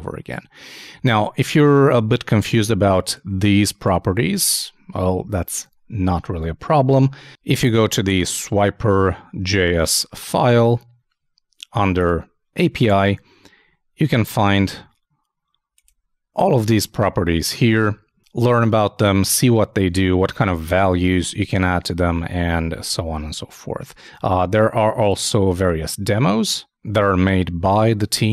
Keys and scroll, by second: 1.4 super+Tab, 5.5 super+Tab.